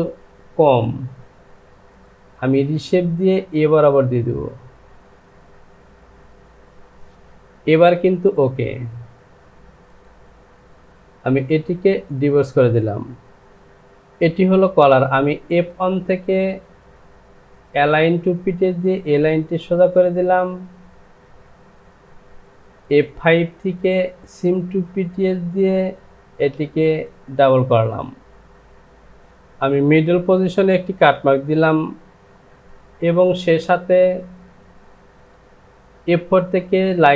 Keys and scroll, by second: 13.5 Home.